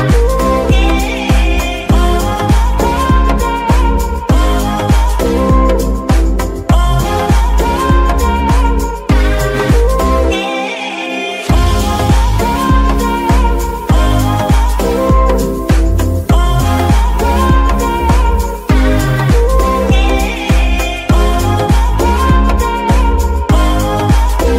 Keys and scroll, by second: 5.4 g, 5.6 z, 7.7 Tab, 8.2 s, 9.0 Tab, 9.4 s, 12.8 ctrl+r, 14.9 KP_9, 14.9 KP_0, 15.2 Return, 23.3 KP_7.